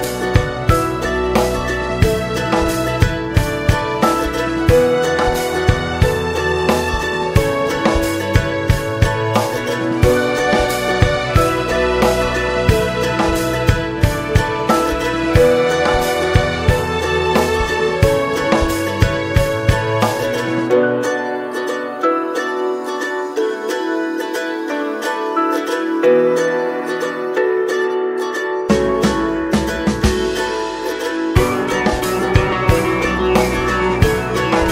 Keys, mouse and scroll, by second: 0.0 ctrl+2, 0.6 middle click, 1.1 click, 2.3-4.1 drag, 4.1 middle click, 4.5 ctrl+s, 4.7 click, 5.0 right click, 5.8 middle click, 6.4 Tab, 6.9 Tab, 7.2 click, 7.7 ctrl+s, 7.9 click, 8.2-8.6 scroll down 4, 8.6-9.6 alt+middle drag, 9.6 shift+a, 11.1 alt+middle click, 11.8 middle click, 12.2 Tab, 12.4 middle click, 13.2 ctrl+b, 17.9 Tab, 18.4 ctrl+a, 18.7 ctrl+a, 20.3 click, 20.6 right click, 21.4-22.8 drag, 22.8 ctrl+1, 23.3 ctrl+2, 23.7 ctrl+3, 25.1 ctrl+4, 26.9 middle click, 27.8 ctrl+s, 28.4 click, 30.0-30.4 scroll up 2, 30.4-32.7 middle drag, 32.7 click, 33.2 middle click, 33.4 ctrl+s, 33.6 click, 34.4-34.7 scroll down 1.